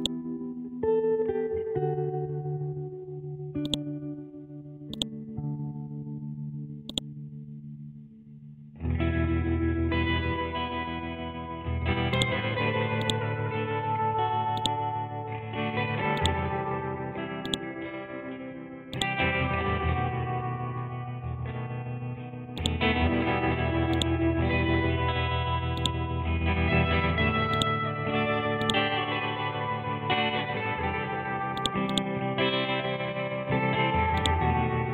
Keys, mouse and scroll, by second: 3.6-10.5 drag, 10.5 scroll down 1, 12.1 click, 13.5 scroll up 1, 14.5 click, 14.9 scroll up 1, 16.1 alt+click, 18.3-18.9 scroll down 1, 18.9 click, 19.3 scroll down 1, 20.3-22.1 scroll up 1, 22.5 click, 22.9 scroll up 1, 23.9 alt+click, 29.9 scroll up 1, 30.6 scroll down 1, 31.5 click, 32.3 scroll down 1, 33.7-34.1 scroll up 1, 34.1-34.9 drag.